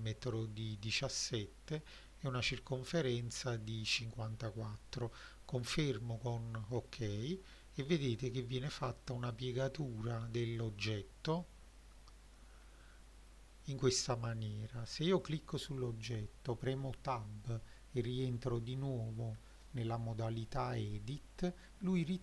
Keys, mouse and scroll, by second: 6.7-7.0 scroll down 2, 7.6-7.9 middle drag, 10.4 click, 11.0 middle drag, 11.6-12.1 scroll up 3, 12.5-13.1 scroll down 2, 13.1 middle drag, 14.1 click, 15.1 click, 17.0 Tab, 18.8-19.8 ctrl+middle drag, 20.4 alt+middle click, 21.3 middle click, 21.9-22.2 shift+middle drag.